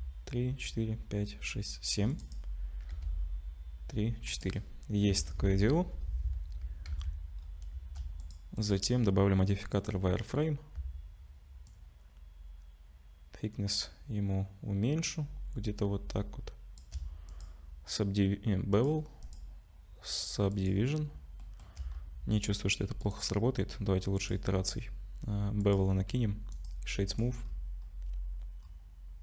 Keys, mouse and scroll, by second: 2.9 ctrl+r, 5.1 Tab, 5.9 /, 7.0 z, 7.4-8.0 scroll up 3, 8.2 click, 8.6 click, 11.7 shift+click, 17.3 click, 19.2 click, 21.4 shift+middle click, 21.9-22.3 scroll up 2, 23.0 click, 24.2 click, 26.5 click, 26.5 right click, 27.4-27.9 scroll up 5, 28.6-29.0 scroll down 1.